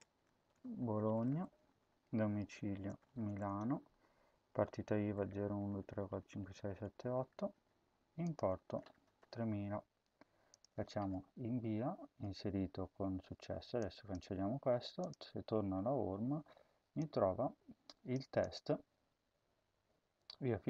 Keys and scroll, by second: 0.0-7.1 typing, 8.4-9.5 typing.